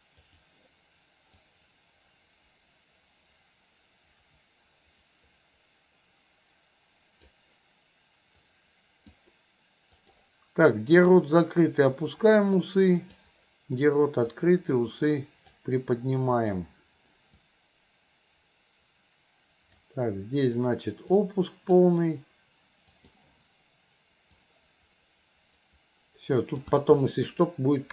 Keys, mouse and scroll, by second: 0.3 click, 1.5-7.4 drag, 8.5 click, 10.1-13.3 drag, 14.4-15.6 drag, 16.5-20.0 drag, 21.3 click, 23.0 click, 24.5-26.9 drag.